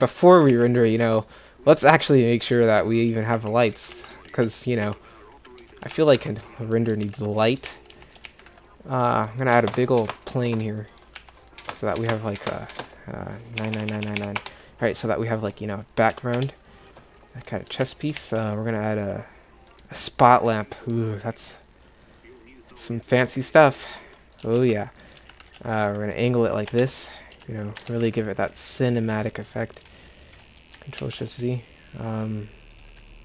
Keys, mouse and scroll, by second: 0.5 a, 2.6-5.8 typing, 6.1 Tab, 7.0 z, 7.7 a, 7.9 a, 9.5 s, 11.3 s, 16.4 KP_0, 17.8 a, 24.4 g, 25.2 r, 26.7 KP_0, 27.3 g, 33.0-33.2 middle drag.